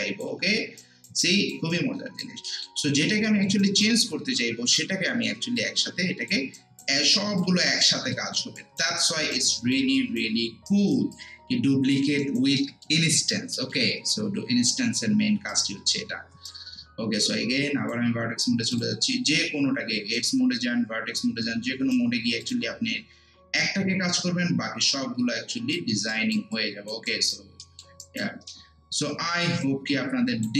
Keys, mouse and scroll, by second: 0.8 alt+right click, 1.2 alt+click, 1.7 alt+right click, 2.5 alt+middle click, 2.8 alt+right click, 3.3 alt+middle click, 3.6 alt+right click, 4.0 alt+middle click, 4.7 click, 6.6 alt+right click, 7.0 alt+click, 7.6 alt+right click, 8.1 alt+middle click, 8.6 alt+right click, 9.5 alt+click, 10.0 alt+right click, 11.1 alt+click, 12.6 alt+middle click, 13.1 alt+right click, 13.5 alt+middle click, 15.5 click, 16.5-18.7 right drag, 18.7 click, 20.2-22.4 right drag, 22.4-26.1 drag, 26.1 alt+right click, 26.5 alt+click, 27.1 alt+right click, 27.6 alt+middle click, 28.0 alt+right click, 29.6 click.